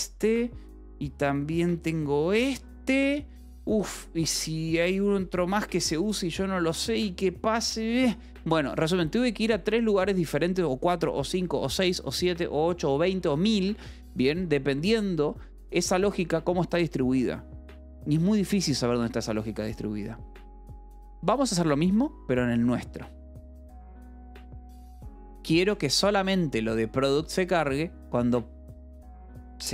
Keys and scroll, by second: 0.8 j, 2.0 d, 4.9-8.2 typing, 9.3 u, 14.9 j, 15.6 k, 21.7 j, 23.1 k, 26.2 shift+v.